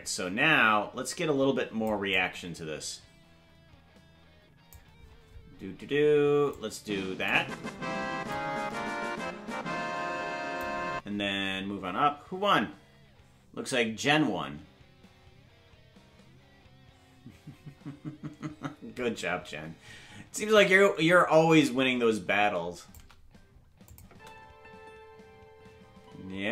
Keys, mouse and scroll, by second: 2.1-4.7 drag, 6.5 click, 8.3-10.6 drag, 20.5-23.0 drag, 23.9 click, 24.1 space.